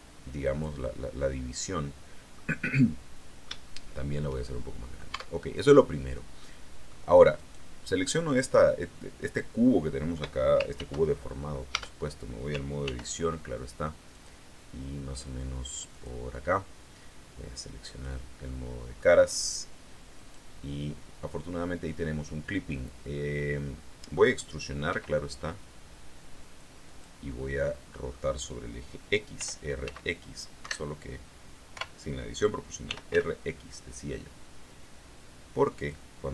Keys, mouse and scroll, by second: 1.1-2.4 middle drag, 2.7-5.1 middle drag, 5.0 Tab, 6.3 middle click, 7.3 right click, 8.7 scroll down 1, 10.7 ctrl+r, 11.7 Tab, 12.8 ctrl+r, 14.0 click, 15.8 click, 17.8 click, 18.4 middle click, 20.0 right click, 20.5-24.2 middle drag, 24.8 e, 26.8 click, 27.1-28.2 middle drag, 29.3 r, 29.8 x, 30.5 Escape, 31.6-33.5 typing, 35.7 click.